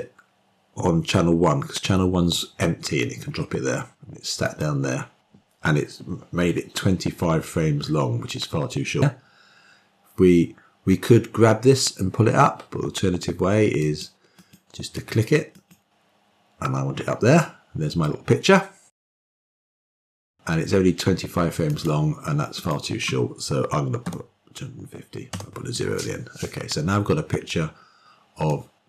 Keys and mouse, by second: 4.4 click, 16.3 click, 16.8 click, 17.5 click, 18.0 click, 22.9-28.4 drag.